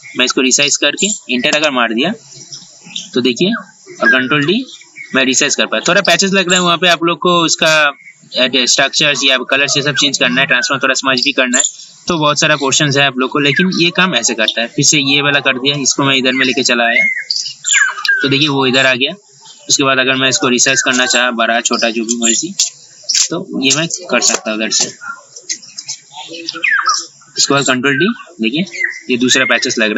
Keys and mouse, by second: 1.6 Return, 4.6 ctrl+d, 14.3-21.7 drag, 23.7 ctrl+d, 24.5 Return, 27.8 ctrl+d.